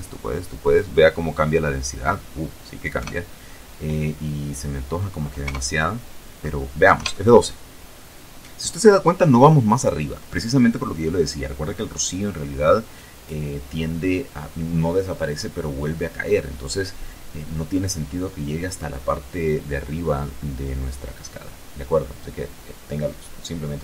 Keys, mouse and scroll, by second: 0.4 KP_0, 2.9 KP_0, 4.4 F12.